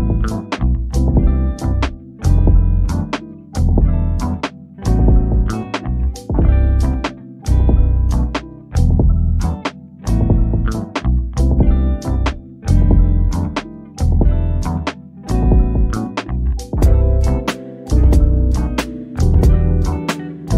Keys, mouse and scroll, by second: 1.5 click, 3.1 typing, 5.2 typing, 6.9 click, 8.0 scroll up 1, 9.3 ctrl+t, 12.0 scroll down 1, 12.6 click, 16.8-18.2 scroll down 1, 20.0 click.